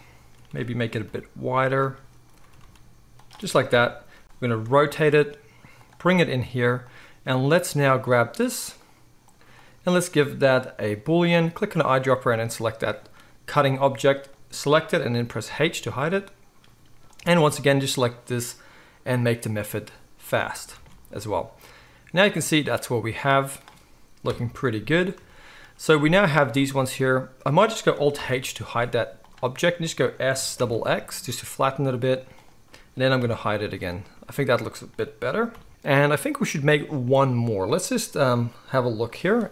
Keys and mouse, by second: 0.5 s, 2.4 s, 3.7 KP_1, 4.6 r, 6.0 g, 7.5 click, 7.5 middle click, 8.8-9.1 drag, 8.8-9.2 middle drag, 9.5-11.7 middle drag, 15.4 h, 19.5 middle click, 20.7 alt+a, 21.1-29.3 middle drag, 24.2 KP_1, 28.1 alt+h, 29.3-30.3 right drag, 30.3 click, 30.3 s, 30.5-34.6 middle drag, 30.5 s, 33.1 h, 34.6 click, 34.7-39.5 middle drag, 35.5 h.